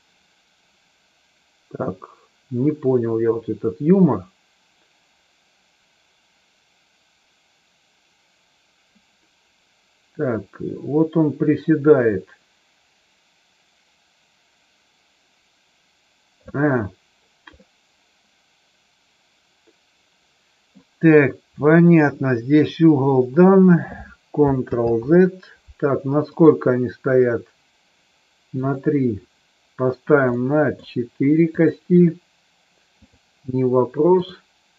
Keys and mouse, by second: 17.6-20.6 middle drag, 24.6 ctrl+z, 28.5 click, 30.2 middle click, 33.0 click, 34.1 click.